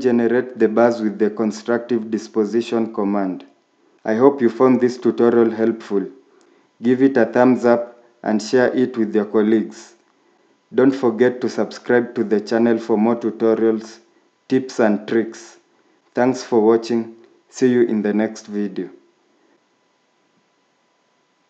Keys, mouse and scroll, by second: 5.8 scroll up 1, 11.7 scroll down 1, 13.0 scroll up 1, 14.0 scroll down 1, 16.9 scroll down 1, 17.1-17.5 scroll up 1, 17.5 scroll down 1, 18.2 scroll down 1, 18.5 scroll up 1.